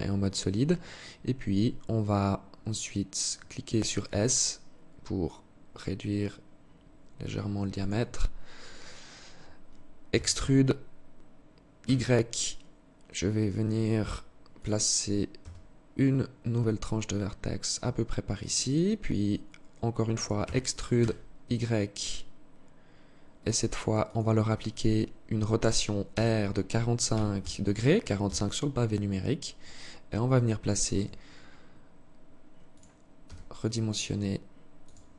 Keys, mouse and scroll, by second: 0.2-0.7 scroll down 2, 0.7-1.0 scroll up 1, 1.0 scroll down 1, 1.3-1.6 scroll up 1, 1.6-2.3 scroll down 1, 3.3 s, 9.4 e, 14.7 s, 19.7 e, 25.4 r, 28.4 scroll up 2, 29.0-30.1 scroll down 1, 30.2 g, 32.5 s, 34.7 g.